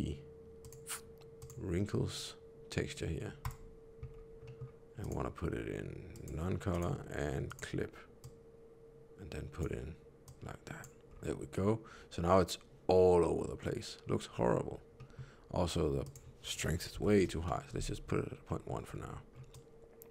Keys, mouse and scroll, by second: 4.0-4.5 scroll up 2, 4.4 middle click, 4.9 click, 6.6 click, 11.0 scroll down 1, 13.3-14.0 scroll down 1, 14.9 middle click, 15.9 click, 18.4 middle click, 18.8-19.3 scroll down 2, 19.4 click.